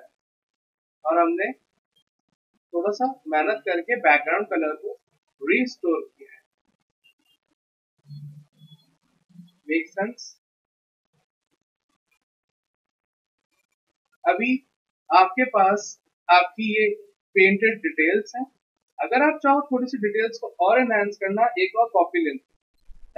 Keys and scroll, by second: 4.1 v, 17.0 z, 22.1 ctrl+j.